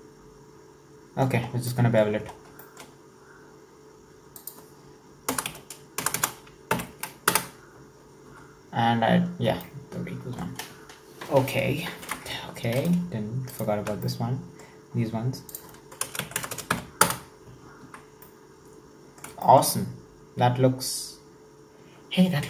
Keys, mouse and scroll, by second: 1.5 scroll down 5, 1.7 middle click, 2.3 scroll down 3, 2.6-4.4 shift+middle drag, 4.4-6.2 drag, 6.2 KP_0, 8.5 Tab, 9.5 scroll down 1, 9.6-12.0 middle drag, 12.0 Tab, 12.8 alt+right click, 13.5 alt+shift+right click, 14.0-15.5 middle drag, 15.5-16.5 drag, 16.5 KP_0, 18.3 Tab, 18.3-22.4 middle drag.